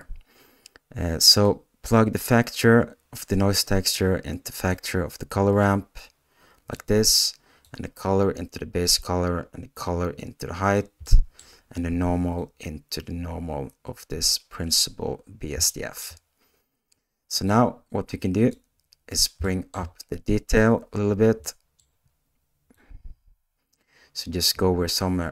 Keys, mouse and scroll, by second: 11.2-15.6 middle drag, 24.8-25.3 drag.